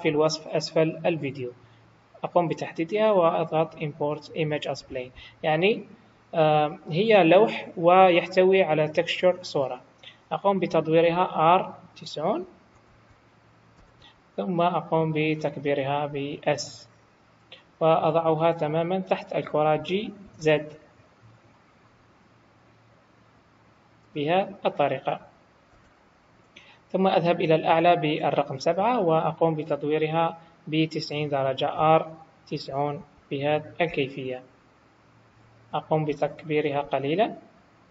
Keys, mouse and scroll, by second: 24.3-25.7 scroll down 5, 25.7 KP_7, 31.8 r, 35.7 scroll down 1, 36.1 s.